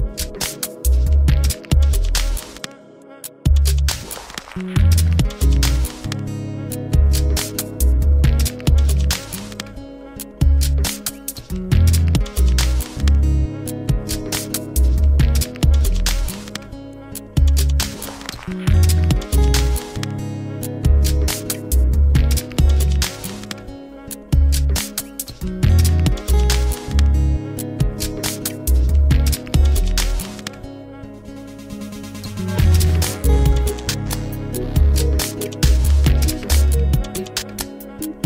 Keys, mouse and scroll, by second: 0.0 click, 1.0 click, 1.7-2.2 middle drag, 2.2 Tab, 3.2 a, 4.0 a, 4.2 a, 4.4 click, 5.4-8.5 drag, 9.1 r, 11.9 Tab, 13.4 click, 14.2-17.3 middle drag, 18.0 ctrl+z, 18.6 ctrl+z, 19.1 ctrl+z, 20.1 Tab, 21.6 click, 22.4-25.5 middle drag, 27.9 click, 29.3-30.4 scroll down 5, 30.4-31.6 scroll down 1, 31.6-34.7 drag, 34.7-37.7 middle drag.